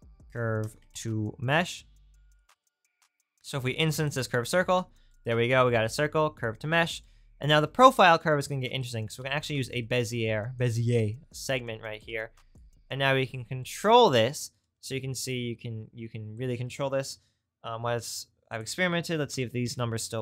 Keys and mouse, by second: 2.7 click, 7.7 shift+a, 11.3 click, 12.0-20.2 drag.